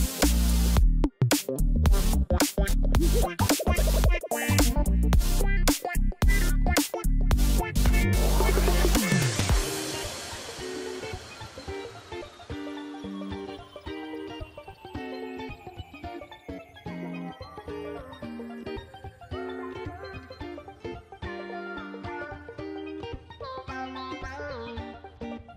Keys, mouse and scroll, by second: 0.9 right click, 1.6 click, 2.1 right click, 22.0 typing, 23.0 Return.